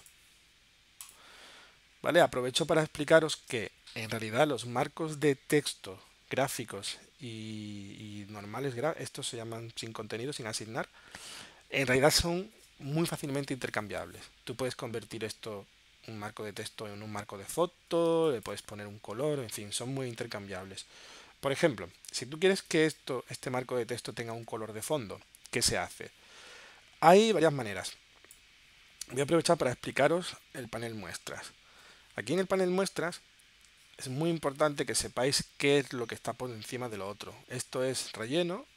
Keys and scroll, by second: 2.9 space, 18.1 space, 24.8 super+z.